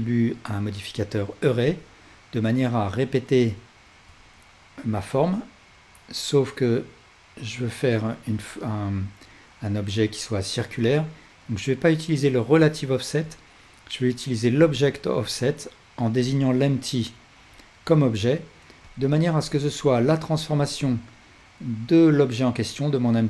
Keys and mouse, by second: 15.2-16.4 drag, 18.9-23.2 drag, 20.6 ctrl+z.